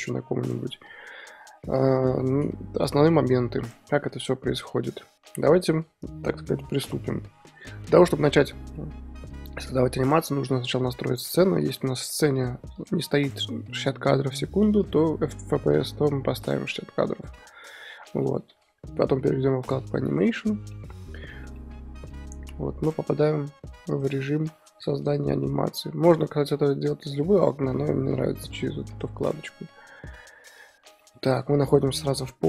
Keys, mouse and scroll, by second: 4.0 KP_1, 7.9-8.4 middle drag, 8.4-8.7 scroll up 2, 8.7-17.0 middle drag, 17.0 click, 17.3-20.1 middle drag, 20.1 click, 20.7 middle drag, 21.0 scroll down 2, 21.2-22.3 shift+middle drag, 22.3-23.3 scroll up 1, 23.3-23.9 scroll up 1, 23.9 click, 25.0 click, 25.2-30.6 shift+middle drag, 30.6 drag, 30.9 middle drag, 31.2 scroll up 2.